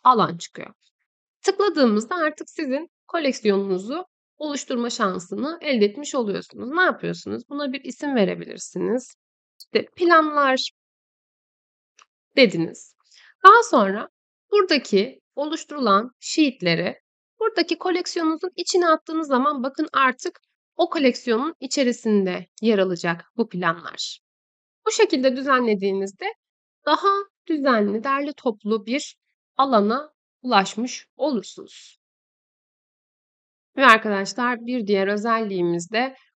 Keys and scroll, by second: 9.5-12.6 typing.